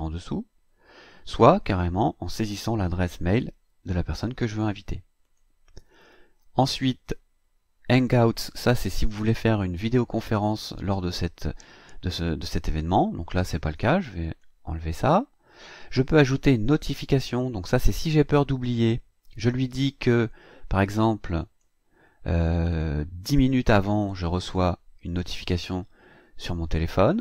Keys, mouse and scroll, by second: 5.2 click, 14.2 click, 18.2 click, 21.4 click, 22.7 click.